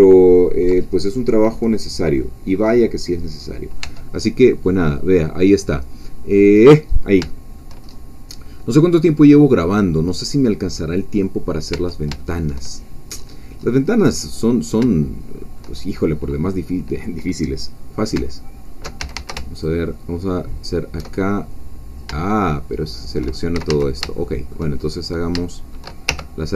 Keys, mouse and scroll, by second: 0.8-1.3 ctrl+scroll down 3, 1.3-2.5 middle drag, 2.5-3.4 scroll up 2, 3.4 scroll down 2, 3.9 Tab, 4.3 scroll down 2, 4.5-5.6 middle drag, 6.4 click, 6.9-7.2 scroll down 1, 7.3 shift+middle click, 7.3 shift+click, 7.8-8.2 shift+scroll up 2, 9.6 click, 11.7 Tab, 12.2 shift+middle click, 12.2 shift+click, 13.1-14.2 scroll up 4, 14.4-14.8 scroll down 2, 14.9-16.1 shift+middle drag, 19.0 alt+shift+a, 19.6 alt+shift+click, 19.8-21.0 alt+shift+middle drag, 21.2 alt+shift+middle click, 22.2-23.5 shift+middle drag, 23.5 shift+a, 24.2 shift+middle click, 24.8-25.1 shift+scroll up 2, 25.5 shift+middle click, 25.6-26.1 shift+scroll up 2, 26.1 shift+2.